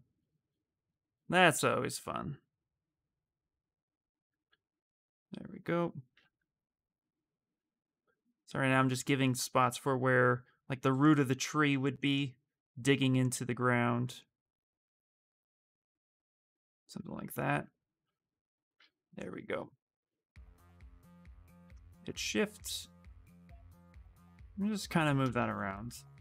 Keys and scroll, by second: 0.8 w, 1.7 q, 4.1 w, 5.9 q, 7.3 w, 19.8 q, 22.0 w.